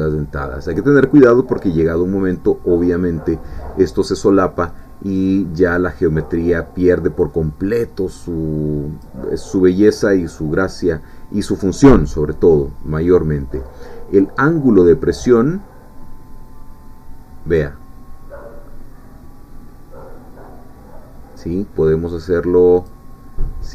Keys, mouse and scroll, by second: 15.2-23.2 drag.